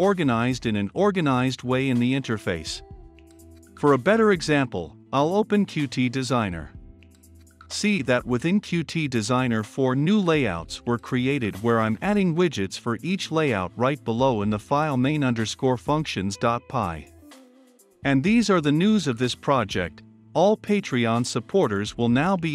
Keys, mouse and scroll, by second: 4.6-12.6 middle drag, 12.6-22.5 drag.